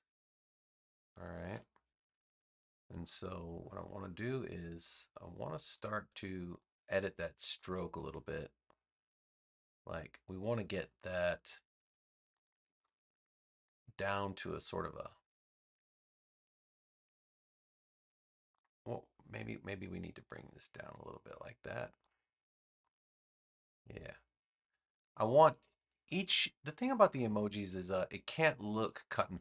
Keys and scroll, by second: 3.3 space, 26.4 space.